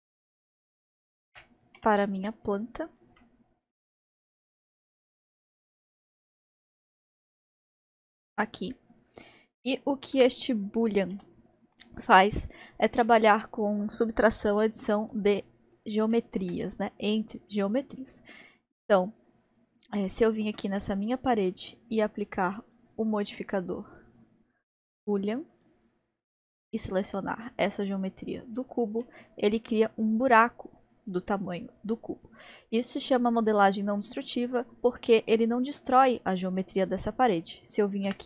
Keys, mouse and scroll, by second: 1.3 g, 3.2-4.2 middle drag, 4.2 g, 6.2 g, 6.3 g, 7.6-10.2 middle drag, 10.2 g, 13.1-18.1 middle drag, 18.1 click, 18.8-20.1 middle drag, 20.1 click, 20.8-22.7 middle drag, 22.8 click, 24.1-26.8 drag, 29.0-31.9 middle drag, 31.9 click, 32.5-33.5 middle drag, 33.5 scroll, 33.5-34.5 scroll up 1, 34.5-35.0 scroll up 3, 35.0-35.6 middle drag, 35.6-36.1 scroll down 2, 36.1 click, 36.8 click, 38.1 g.